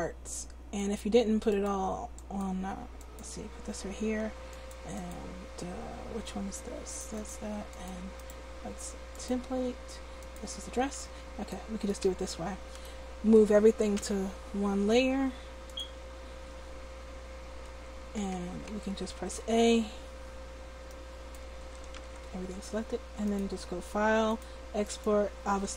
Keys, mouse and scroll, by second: 6.8 click, 8.2-10.2 drag, 11.0 a, 11.5 click, 12.0 a, 13.9 m, 18.3 Tab, 18.7 Tab, 19.0 a, 19.3 a, 20.9-22.1 drag, 22.1 ctrl+z.